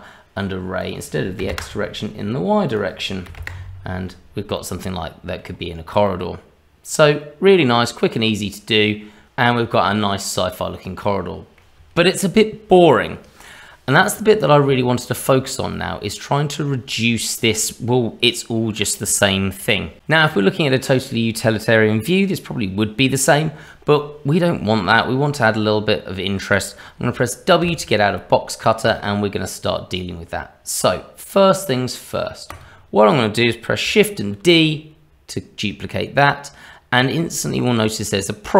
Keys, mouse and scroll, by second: 0.8 click, 4.5 middle click, 5.5 scroll up 2, 6.0 middle click, 8.9 middle click, 10.0-10.6 scroll down 1, 10.6 middle click, 14.8 shift+middle click, 15.7 middle click, 19.2 shift+middle click, 27.6 w, 28.8 click, 29.1-30.6 scroll down 2, 32.5 click, 34.4 shift+d.